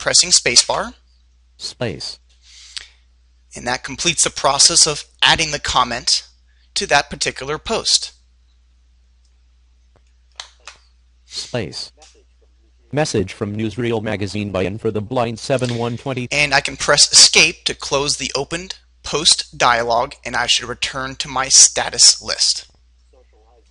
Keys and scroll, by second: 8.9 space, 21.1 Escape.